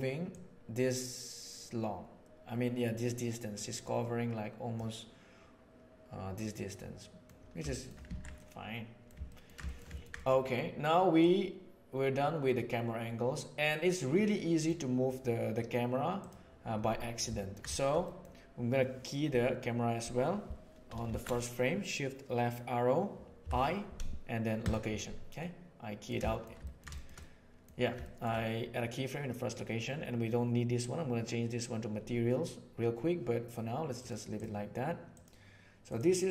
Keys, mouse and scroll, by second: 0.4-4.8 drag, 6.3-7.2 middle drag, 7.7 shift+middle click, 8.1 alt+a, 8.3-10.2 middle drag, 11.2-14.6 drag, 16.2 drag, 17.3 ctrl+click, 18.0 click, 21.0 shift+Left, 23.4 i, 25.4-26.0 middle drag, 26.2 shift+middle drag, 26.6 ctrl+middle drag, 26.9 shift+middle click, 27.2-27.6 middle drag, 28.0 shift+click, 33.9 click, 35.1 click, 35.8 click.